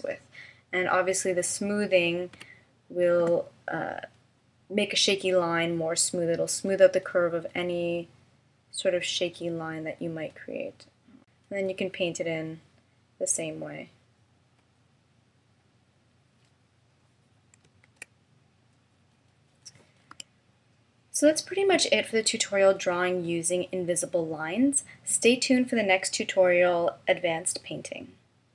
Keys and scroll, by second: 2.3 5, 3.2 Return, 18.5 shift+m, 20.8 d.